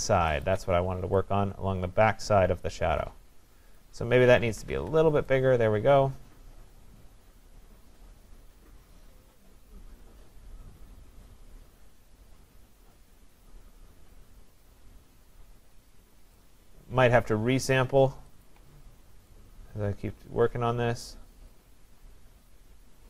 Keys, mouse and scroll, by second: 0.5 alt+click, 3.8 click, 4.6 ], 4.8 ], 16.3 click, 18.5 alt+click.